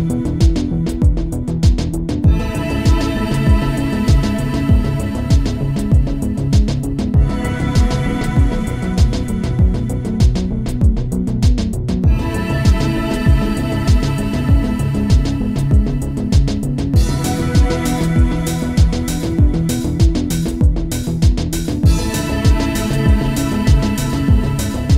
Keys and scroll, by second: 4.4 space.